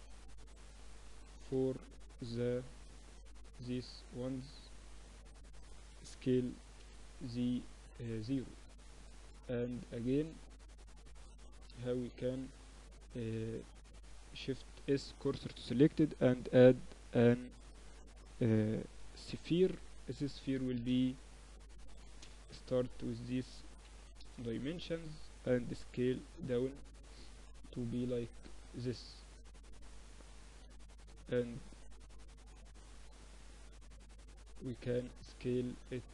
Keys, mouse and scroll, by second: 0.7 b, 1.4 z, 1.7 a, 2.5 b, 3.4 middle click, 4.3-6.3 drag, 5.5 middle click, 6.1 s, 7.6 Tab, 8.3 z, 10.6 Tab, 14.1 shift+s, 15.7 Tab, 16.1 shift+a, 19.1 F6, 26.1 s, 28.6-30.6 middle drag, 30.6-32.4 drag, 32.4-33.9 middle drag, 33.9-35.7 drag, 35.7-36.1 middle drag, 35.7 s.